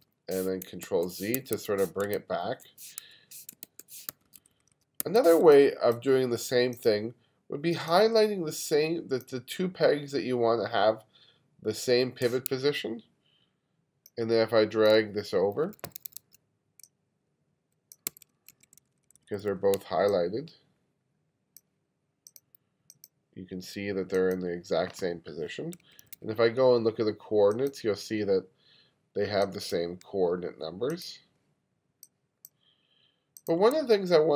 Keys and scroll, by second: 0.9 super+z, 1.4 1, 2.2 super+z, 3.7 super+z, 4.1 1, 5.5 space, 15.0 2, 18.1 2, 25.9 2.